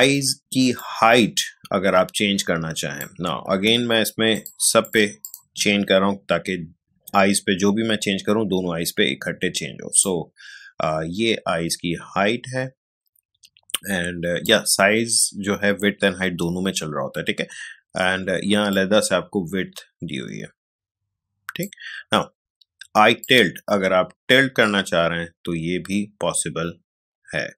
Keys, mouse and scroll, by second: 0.7-3.5 drag, 3.5 ctrl+z, 4.3 click, 10.0-17.1 drag, 18.7-27.5 drag.